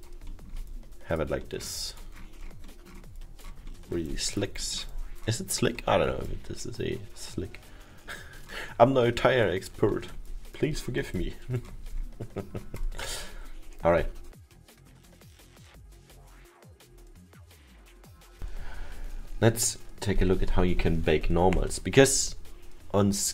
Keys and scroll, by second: 2.9 alt+7, 5.0 alt+7.